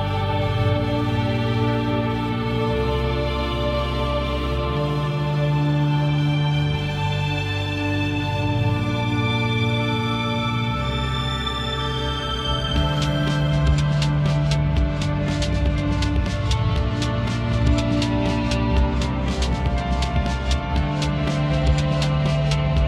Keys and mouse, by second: 0.0 click, 1.2 shift+middle click, 3.2 shift+middle click, 3.4 click, 4.2 shift+middle click, 4.4 click, 4.8 middle click, 5.0 click, 9.1 shift+middle click, 9.8 ctrl+middle click, 10.3 middle click, 11.2 ctrl+middle click, 12.8 click, 15.4 shift+middle click, 16.3 shift+middle click, 17.0 middle click, 17.6 shift+middle click, 18.0 middle click, 18.6 shift+middle click, 19.5 shift+middle click.